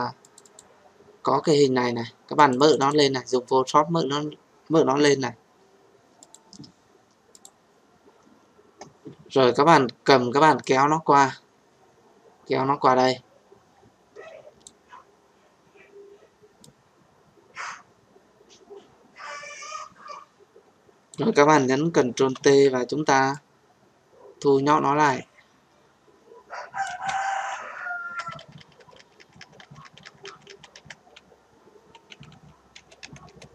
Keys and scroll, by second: 22.1 ctrl+t.